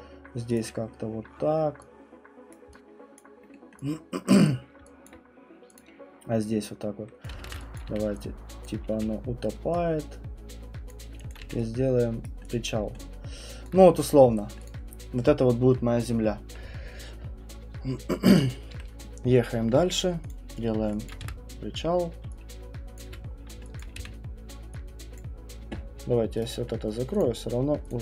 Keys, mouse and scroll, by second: 0.5 click, 2.5 click, 3.1 alt+click, 3.5 alt+right click, 3.5 alt+middle click, 4.4 alt+right click, 5.0 alt+click, 5.7 click, 7.2 click, 7.3 ctrl+z, 7.7 click, 7.9 q, 8.7 click, 8.9 w, 10.9 click, 11.3 alt+click, 11.4 q, 12.2 right click, 12.5 click, 12.7 scroll, 13.7 alt+click, 13.7 middle click, 14.0 middle click, 14.7 click, 18.3 middle click, 18.3 middle click, 20.3 click, 20.7 middle click, 20.8 middle click, 21.2 w, 23.0 click, 23.1 f, 23.3 middle click, 23.4 middle click, 23.5 middle click, 23.5 middle click, 24.0 r, 25.1 alt+right click, 25.2 alt+click, 26.4 right click, 27.2 click, 27.9 click.